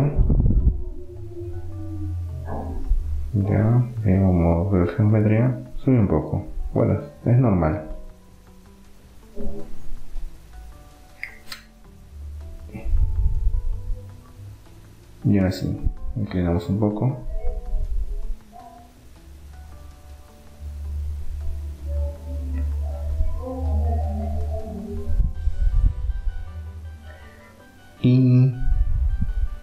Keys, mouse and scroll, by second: 1.5-5.5 drag, 6.8-8.8 middle drag, 7.8 KP_3, 9.8-11.5 drag, 12.3-14.1 drag, 15.5 r, 23.8-25.3 middle drag, 25.5-29.1 middle drag.